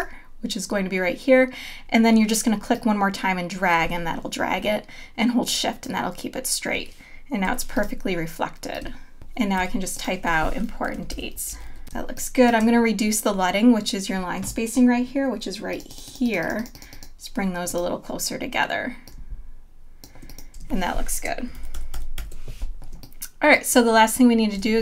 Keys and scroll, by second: 7.5 v, 9.6 t, 10.7-12.2 typing, 20.6 space, 21.7 super+-, 22.9 space, 24.6 space.